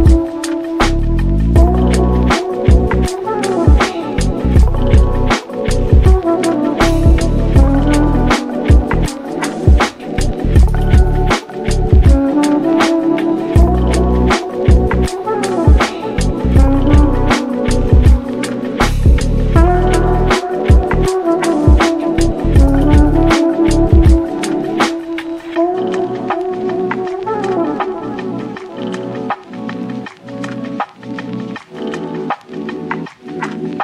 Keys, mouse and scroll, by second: 0.2 click, 0.6 ctrl+z, 0.9 ctrl+s, 1.2 click, 1.4 click, 2.3-2.7 drag, 3.9 click, 4.5 click, 5.3 click, 6.1 KP_0, 6.6 ctrl+s, 6.7 click, 7.0-7.4 scroll up 1, 7.4-8.4 shift+middle drag, 8.4 drag, 8.5 scroll up 3, 8.8 ctrl+s, 9.6 click, 10.8 Tab, 11.2 click, 11.8 shift+click, 13.4-17.8 drag, 18.0 click, 19.2 u, 20.2 Tab, 20.6 click, 20.8 ctrl+s, 21.6-22.8 drag, 22.9-23.3 scroll down 1, 23.3 scroll up 1, 23.5-23.8 shift+middle drag, 23.8 ctrl+s, 24.1-24.9 middle drag, 24.9 scroll up 1, 25.1-25.7 middle drag, 25.7 click, 25.9 Tab, 26.5 ctrl+r, 27.5-28.1 scroll up 4, 28.1 3, 28.5 click, 28.9 shift+click, 29.7-31.5 drag, 31.5 Tab, 31.6-31.9 scroll down 5, 31.9 click, 32.2 scroll up 1, 32.4-33.8 middle drag.